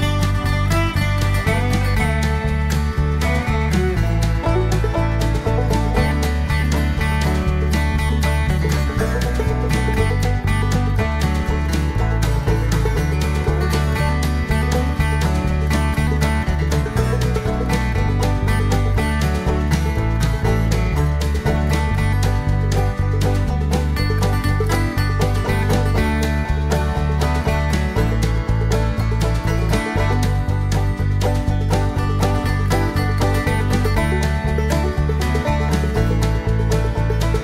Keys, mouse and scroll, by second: 0.0-0.5 typing, 1.7-3.1 typing, 4.9 click, 6.8 right click, 7.9 click, 8.8 click, 10.4 click, 12.1 click, 13.5 click, 14.4 click, 16.8 click, 21.7 click, 22.9 click, 24.9 click, 25.8 click, 28.5 click, 29.8 click, 32.8 ctrl+v, 33.6 click, 34.9 click, 36.8 click.